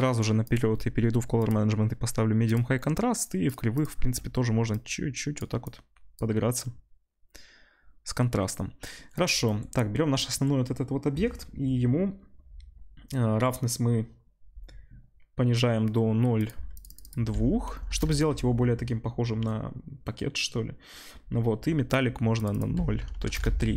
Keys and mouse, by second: 0.4-3.5 drag, 3.5 middle click, 3.8-16.8 drag, 16.8 middle click, 16.9-23.7 drag.